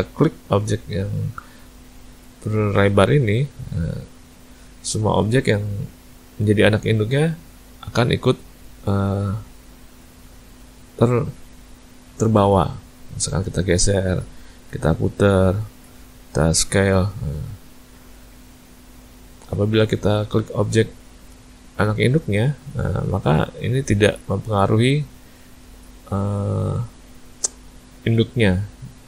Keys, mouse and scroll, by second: 0.3 click, 3.4 click, 9.1 click, 12.2 click, 13.8 click, 14.8 r, 15.7 ctrl+z, 16.4 s, 18.0 ctrl+z, 20.2 click, 21.3 shift+click, 22.0 shift+click, 22.6 click, 23.9 click, 24.5 click, 26.1 click, 26.7 click, 28.2 click, 28.7 click.